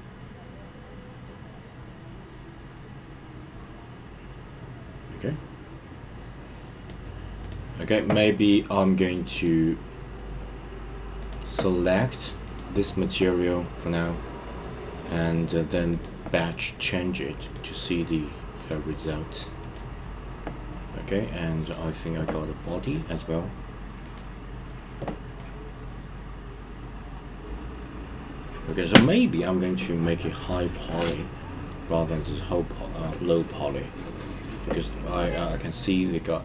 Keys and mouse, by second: 11.3-12.6 drag, 15.0-16.0 drag, 17.4 click, 18.6 click, 21.6 click, 22.9-24.2 drag, 25.4-33.4 middle drag, 35.4 click.